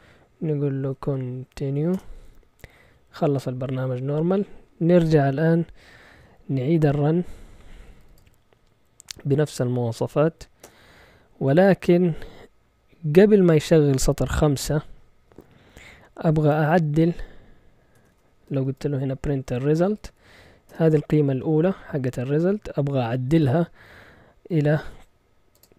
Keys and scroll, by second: 0.6-2.0 typing, 7.5-8.4 typing, 16.0-16.8 typing, 18.0-20.6 typing, 20.7 Return, 24.3-25.5 typing.